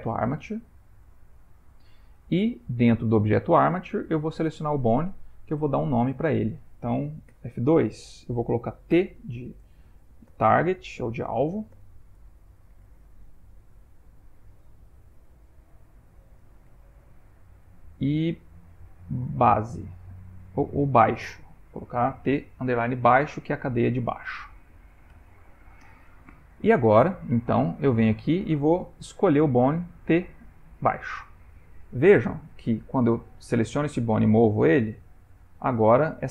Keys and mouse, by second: 5.7 click, 6.4 Tab, 7.3 F2, 25.3 Tab, 26.9 click, 28.1 click, 31.8 click, 33.9 g.